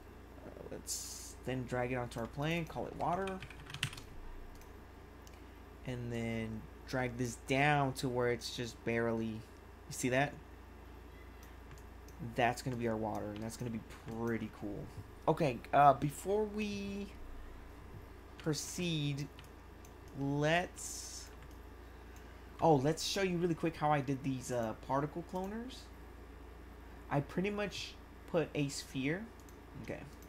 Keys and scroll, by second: 2.8-4.3 typing, 13.3 1, 18.5 1.